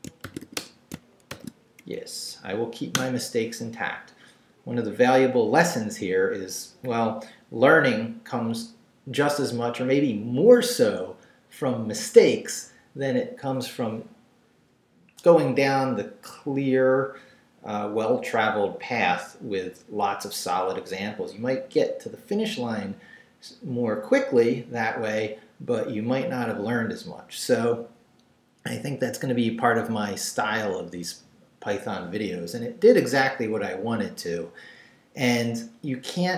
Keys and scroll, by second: 0.0-1.3 typing, 1.8 shift+Up, 2.9 Return.